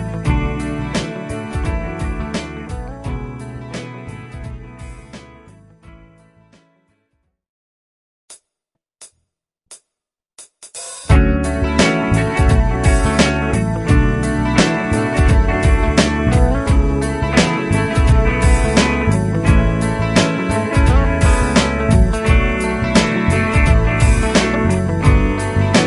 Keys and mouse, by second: 7.0 right click, 24.2 Right, 24.4 Right, 25.2 Left.